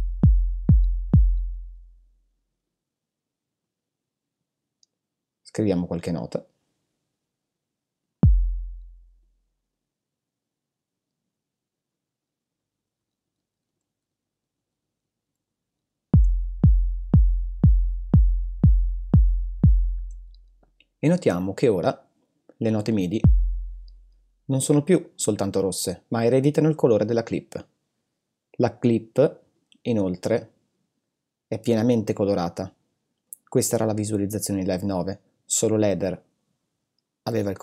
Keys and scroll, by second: 0.6 s, 13.2 super+d, 16.1 super+space, 16.8 space, 19.9 space.